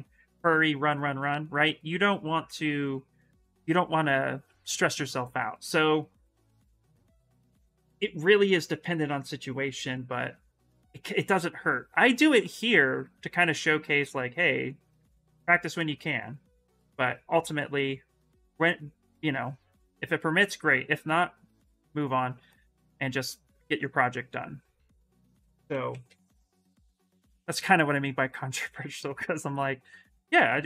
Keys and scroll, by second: 0.9 s, 3.7 s, 5.5 s, 20.5 s, 25.2-26.6 typing.